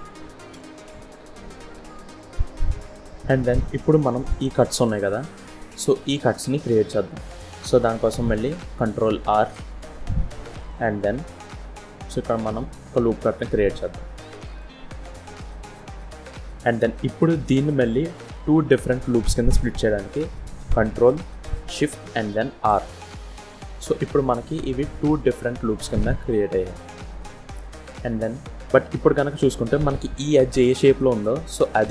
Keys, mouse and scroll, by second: 0.4 KP_1, 1.5 z, 2.3-2.8 scroll up 4, 2.9 shift+middle click, 7.1 click, 9.3 ctrl+r, 22.5 ctrl+shift+r.